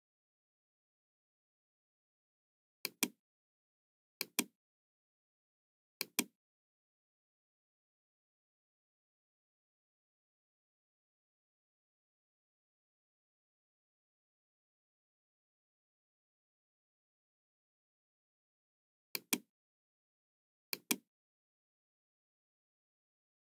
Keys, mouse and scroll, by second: 2.6 Return, 2.6 KP_9, 2.6 KP_1, 2.7 click, 4.2 click, 6.0 click, 9.0 middle click, 10.1-11.8 middle drag, 12.2-12.6 scroll down 1, 13.7 middle click, 19.1 click, 20.7 click.